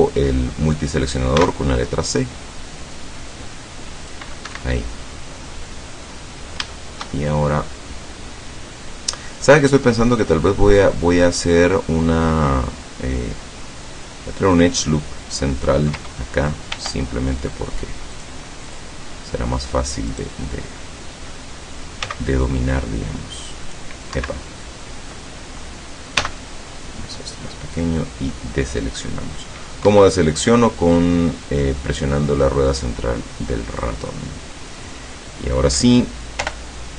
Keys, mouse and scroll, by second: 1.4 c, 2.1-4.3 drag, 4.6 Escape, 4.8-6.3 middle drag, 6.4 scroll up 1, 6.7-9.1 shift+middle drag, 10.0 scroll down 2, 10.4 middle click, 11.4-11.7 scroll up 2, 16.7 ctrl+r, 18.2 click, 18.7 click, 20.2 right click, 20.5-21.5 middle drag, 22.1 c, 22.7-24.0 drag, 24.2 Escape, 26.2 c, 26.7-27.3 scroll up 2, 27.3 middle click, 28.3-29.6 middle drag, 29.9 Escape, 32.9-34.9 drag, 34.9-35.2 scroll up 1, 36.4 o.